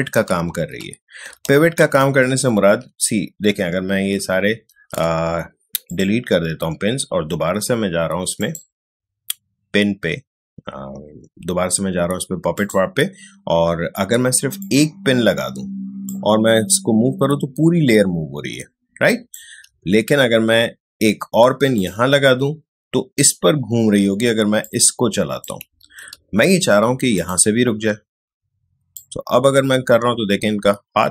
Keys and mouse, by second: 0.5 ctrl+z, 1.4 ctrl+z, 2.5 ctrl+alt+z, 5.8 click, 12.5-19.8 drag, 19.8 ctrl+z, 21.7 click, 24.6 click, 25.8 ctrl+z, 27.1-31.1 drag.